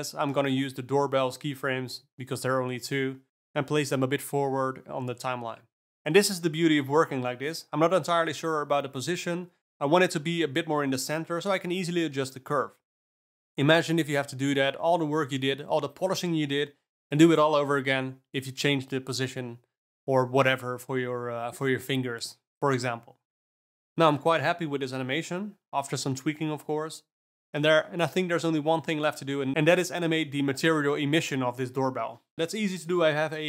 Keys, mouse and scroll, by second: 0.9 click, 1.2 space, 3.5 space, 3.8 click, 4.1 space, 4.7 space, 5.5 alt+middle drag, 5.8 space, 6.0 space, 8.0-9.4 alt+middle drag, 9.4 Tab, 10.4 click, 10.6 alt+scroll down 1, 10.8 ctrl+alt+middle click, 11.6 g, 16.6 Tab, 19.0 click, 19.6 d, 20.0 scroll up 3, 20.3 d, 20.6 click, 22.2 alt+a, 22.6 click, 23.7 g, 25.8 space, 27.2 space, 27.6 click.